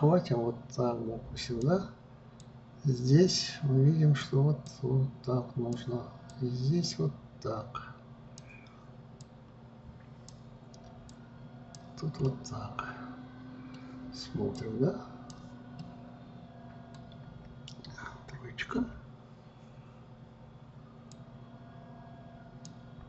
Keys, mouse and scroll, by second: 2.5-12.4 drag, 12.4-14.7 middle drag, 14.7-16.0 drag, 16.0-18.9 middle drag, 18.9 KP_3, 21.4-23.0 drag.